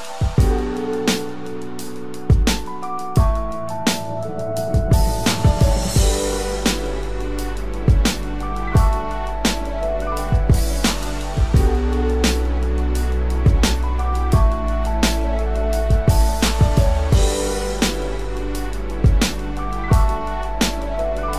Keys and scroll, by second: 1.9 ctrl+=, 3.1 ctrl+-, 11.3 ctrl+-, 11.8 ctrl+-, 12.1 ctrl+=, 14.2 ctrl+=, 18.7 ctrl+-.